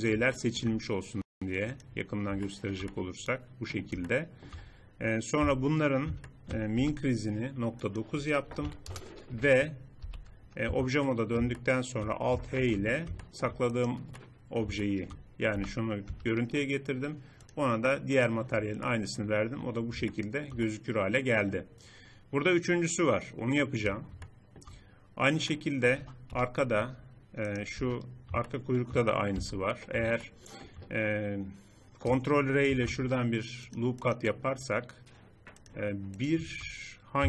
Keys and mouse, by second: 2.9 middle click, 4.2 middle click, 5.2 z, 6.6 n, 7.6-8.8 drag, 9.8 n, 10.4 Tab, 12.4 alt+h, 15.3 g, 22.8-24.1 middle drag, 26.0 KP_3, 27.6 Tab, 29.2 z, 32.5 ctrl+r, 35.6 click, 36.0 middle click, 37.0 z.